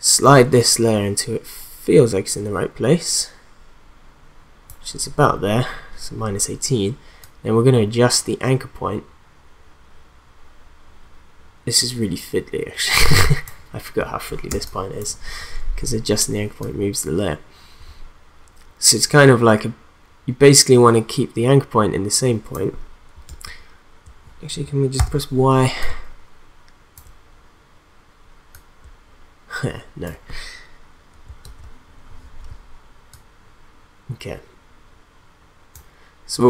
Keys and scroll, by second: 14.5 space, 23.3 ctrl+z, 25.0 y, 31.4 ctrl+z.